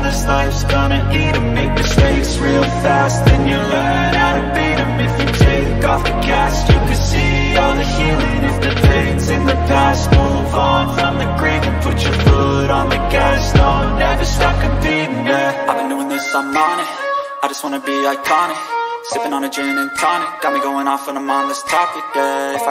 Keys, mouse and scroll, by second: 6.0 click, 7.6 click, 9.2 click, 9.7 click, 18.9-21.7 drag, 22.3 click.